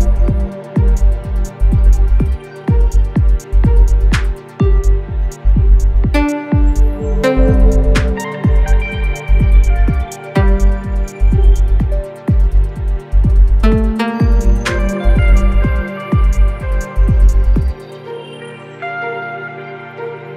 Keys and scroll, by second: 1.1 ], 3.0 4, 8.2 3, 8.6 1, 10.1 ], 12.6 ,, 15.8 4, 17.6 3, 18.1 4.